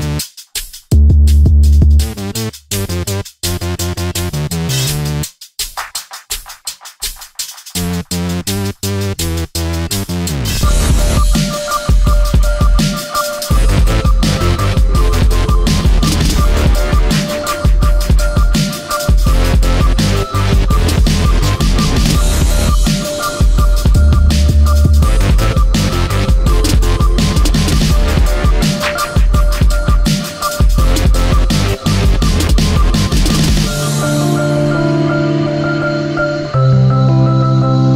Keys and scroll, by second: 5.9 space, 10.8 space, 11.2 ctrl+z, 11.4 space, 16.4 space, 23.8 space, 26.2 space, 26.8 ctrl+z, 26.9 ctrl+space, 33.3 alt+space, 35.0 space, 35.7 ctrl+z, 35.8 space.